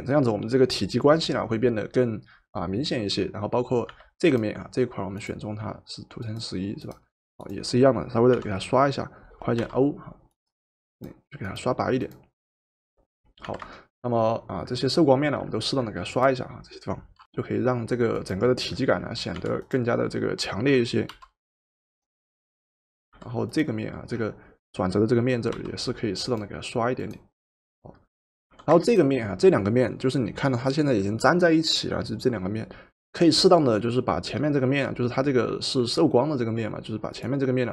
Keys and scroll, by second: 3.9 v, 8.3 b, 9.6 o, 13.5 v, 17.2 o, 19.5 v, 21.2 o, 23.2 v, 25.5 o, 28.6 v.